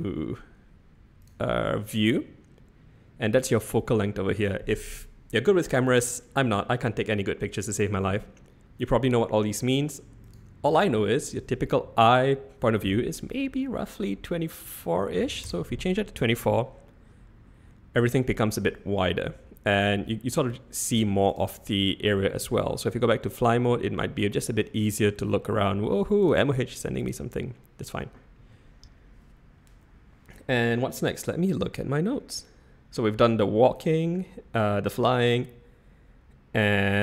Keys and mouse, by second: 1.2 click, 10.4-15.9 drag, 18.6 `, 20.1 `, 22.4 shift+`.